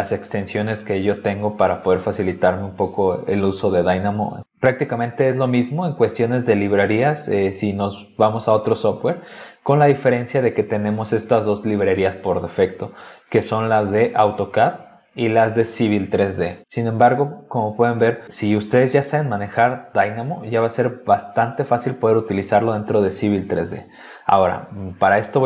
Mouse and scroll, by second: 13.1 click, 14.1 click, 15.1 click, 24.4 click.